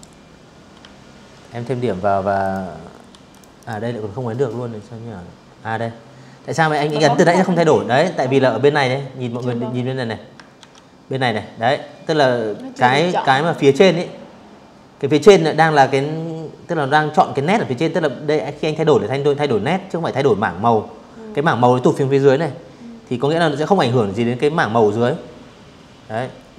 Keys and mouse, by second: 0.1 click, 0.8 v, 0.9 click, 1.2 click, 4.4 click, 8.3 ctrl+1, 11.2 click, 26.5 Escape.